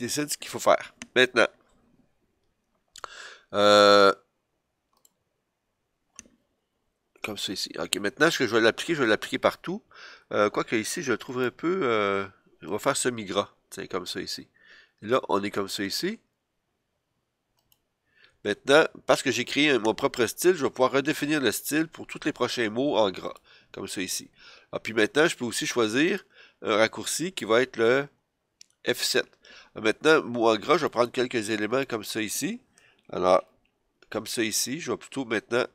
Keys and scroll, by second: 6.8 super+z, 33.6 F7.